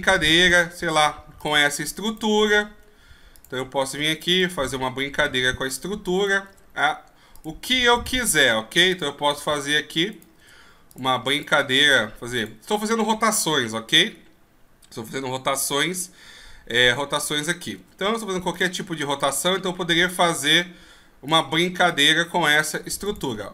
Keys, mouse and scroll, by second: 0.4 right click, 0.6 r, 2.0 right click, 2.4 r, 4.3 right click, 4.6 r, 6.1 right click, 6.5 r, 7.9 right click, 8.2 r, 9.5 right click, 10.1 right click, 10.4 r, 11.3 right click, 11.6 r, 16.7 right click, 17.8 r, 19.1 right click, 20.3 r, 21.9 right click, 22.2 r.